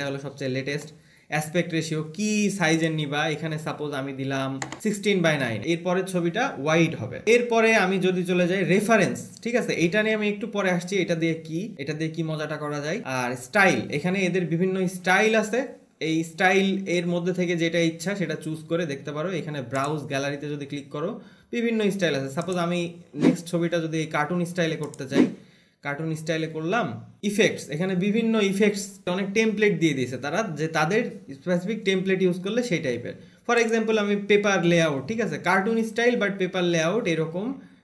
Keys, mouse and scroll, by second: 5.3 click, 7.3-8.6 scroll, 11.7-14.4 scroll, 21.2 click, 21.5-22.8 scroll, 22.8 click, 25.5 click, 26.1-27.2 scroll, 34.0 click, 35.3-37.8 scroll.